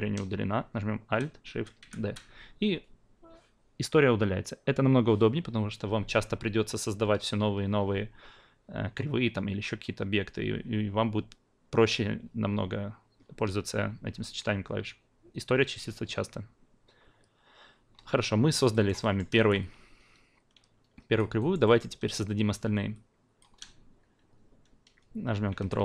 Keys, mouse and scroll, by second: 16.5-17.5 scroll down 2, 17.5-18.7 scroll down 1, 18.7 alt+right click, 18.9 alt+middle click, 18.9 alt+scroll down 1, 19.0 alt+middle drag, 19.3 alt+right click, 19.6-21.1 alt+drag, 21.4 alt+right drag, 21.6 alt+middle drag, 22.9-23.4 alt+drag, 25.5 ctrl+d.